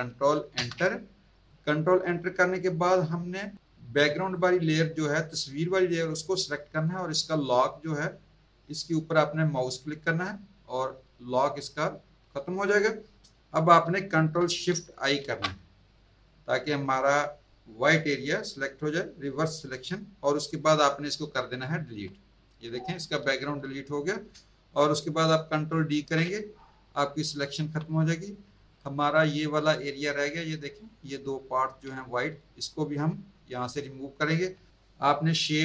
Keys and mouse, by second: 0.5 ctrl+Return, 4.2 click, 9.9 click, 13.4 ctrl+z, 15.1 ctrl+shift+i, 21.8 Delete, 25.9 ctrl+d, 27.5 z, 28.2 click.